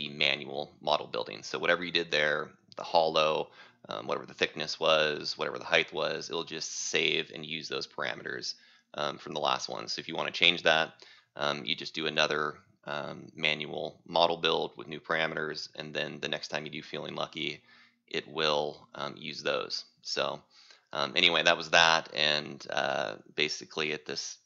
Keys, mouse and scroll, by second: 4.2 click, 5.7 right click, 10.5 click.